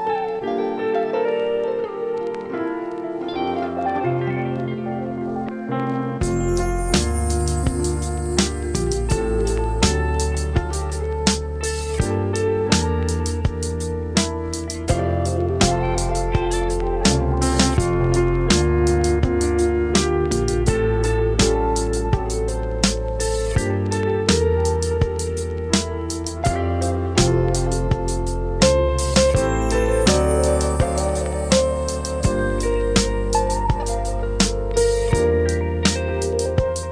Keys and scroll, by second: 5.8 space, 7.2 [, 9.0 [, 10.9 [, 12.5 ], 14.1 space, 18.9 x, 19.6 [, 33.5 space, 36.5 space.